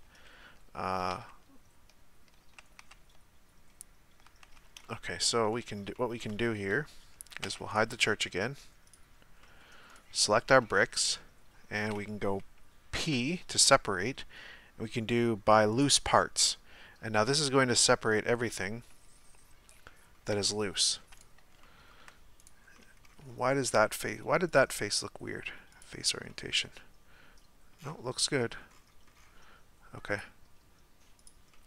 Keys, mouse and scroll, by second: 0.1 Tab, 1.1 Tab, 2.4 Tab, 2.8 Tab, 4.3 Tab, 4.8-7.4 middle drag, 7.4 Tab, 7.7-8.9 right drag, 8.9 click, 9.4-9.9 middle drag, 9.9 right click, 10.3 Tab, 11.1-15.8 middle drag, 15.8 p, 16.5-20.3 middle drag, 20.3 Tab, 21.2-21.6 right drag, 21.6-22.4 shift+middle drag, 22.4-22.7 right drag, 22.7-23.3 middle drag, 23.3-25.7 scroll up 1, 25.7-26.3 drag, 26.3-27.7 middle drag, 27.7-28.2 scroll down 11, 28.2-28.7 middle drag, 28.7-30.2 scroll up 8, 30.2-31.2 scroll up 1, 31.2 click, 31.5-31.6 middle drag.